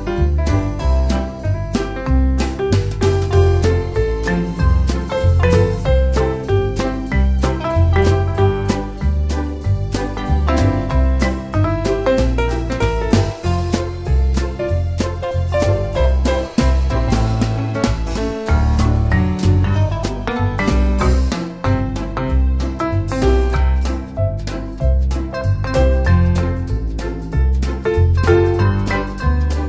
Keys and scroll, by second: 3.3 d, 11.1 BackSpace, 11.3 BackSpace, 21.7 super+c, 22.0 super+v.